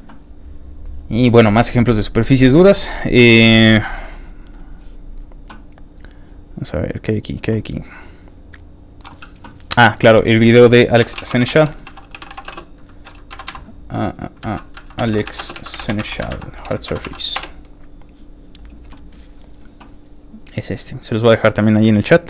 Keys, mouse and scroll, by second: 0.2-0.9 scroll down 4, 1.5 scroll down 1, 1.8-2.3 scroll up 3, 4.0 click, 4.6 click, 5.1-5.4 scroll down 3, 5.9 scroll up 2, 6.1-6.7 scroll down 2, 6.7 ctrl+middle click, 7.1 ctrl+middle click, 7.8 scroll down 1, 8.0 ctrl+middle click, 8.2 scroll up 1, 8.6 middle click, 8.7 scroll down 1, 9.9 click, 10.8-13.0 typing, 13.3 Down, 14.4 ctrl+a, 14.8-16.9 typing, 16.9 Down, 17.4 Return, 19.3 scroll down 3, 20.2 click.